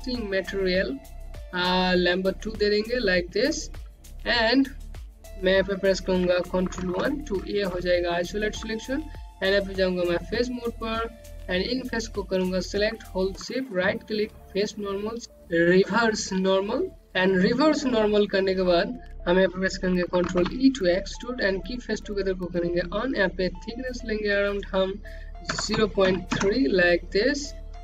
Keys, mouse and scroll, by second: 7.3 1, 8.3 alt+click, 9.6 right click, 11.7 click, 14.0 right click, 20.8 e, 22.5 click, 26.0 KP_0, 26.3 KP_Decimal, 26.6 KP_3, 26.8 KP_Enter.